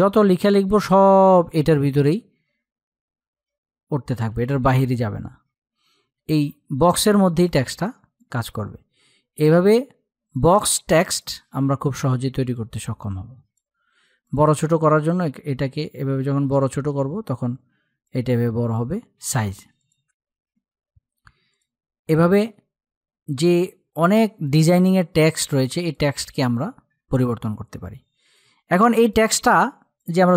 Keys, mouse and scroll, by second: 0.0-2.3 typing, 3.3 typing, 6.2-17.4 drag, 17.4 click, 18.7 ctrl+z, 19.2 click, 19.5-19.9 typing, 20.9 click, 23.8 click, 28.3 click, 28.5 click.